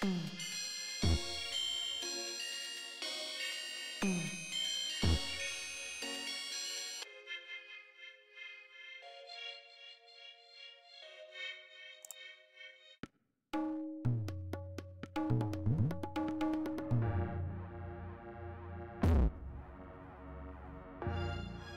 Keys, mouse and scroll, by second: 3.6 right click, 5.1 click, 18.2 click, 20.9-21.7 ctrl+drag.